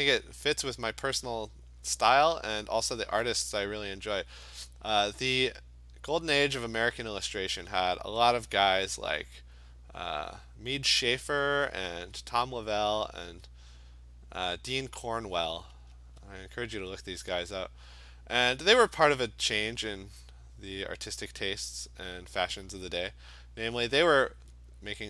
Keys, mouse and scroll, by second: 0.6 click, 1.0 click, 1.4 click, 1.7 click, 2.0 click, 2.5 click, 3.0 click, 4.2 alt+click, 4.4 click, 6.0 click, 6.4 click, 7.2 click, 8.1 alt+click, 8.3 alt+click, 9.0 click, 11.4 click, 12.0 alt+click, 12.7 click, 13.2 alt+click, 14.0 click, 14.6 click, 15.4 click, 16.0 alt+click, 17.9 click, 18.7 alt+click, 19.9 click, 21.1 click, 21.9 alt+click, 22.4 alt+click, 23.8 click, 24.4 alt+click.